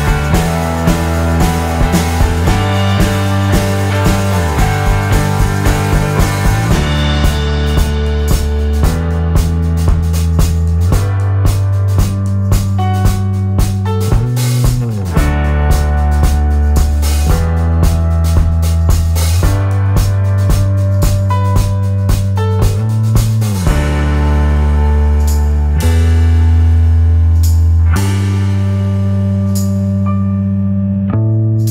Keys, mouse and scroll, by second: 0.2 shift+click, 0.7-4.7 shift+drag, 5.2 shift+click, 7.2-10.7 shift+drag, 10.8 shift+click, 11.2-13.5 shift+drag, 13.9-15.8 shift+drag, 17.2 shift+click, 18.2 shift+click, 18.5 shift+click, 18.9 shift+click, 21.6-23.5 shift+drag, 23.8 shift+click, 25.0 shift+click, 25.7 shift+click, 28.5-30.5 shift+drag, 31.0 shift+middle click.